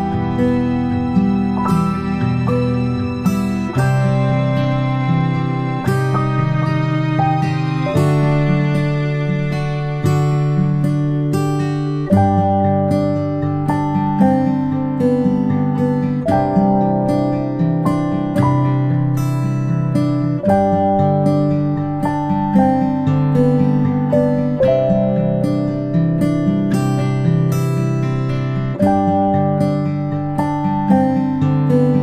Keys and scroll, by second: 6.7-7.0 ctrl+space, 9.7 space, 10.0 space, 11.0-14.1 space, 27.7 ctrl+shift+[, 28.1 ctrl+], 28.3 ctrl+].